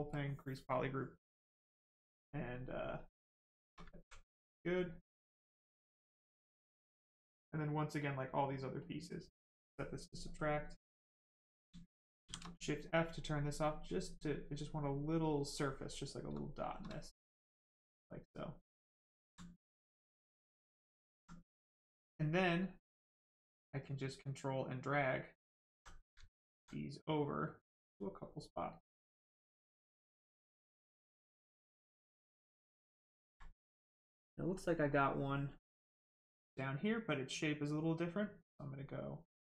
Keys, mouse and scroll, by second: 0.1 click, 2.4 right click, 3.9 alt+right click, 4.7 right click, 5.8 click, 8.8 click, 12.2 shift+f, 13.7 click, 15.8 right click, 17.4 shift+click, 19.2 alt+right click, 20.1 alt+right click, 20.2 alt+right click, 23.0 ctrl+click, 25.6 alt+right click, 27.4 ctrl+click, 29.6 ctrl+click, 36.0 ctrl+click.